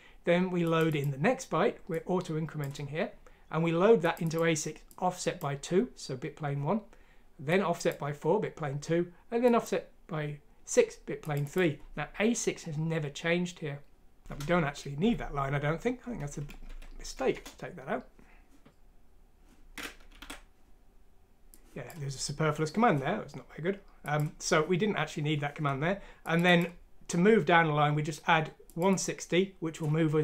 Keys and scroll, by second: 14.2 Home, 15.0 Delete, 16.7 F6, 17.3 Return, 20.2 alt+Tab.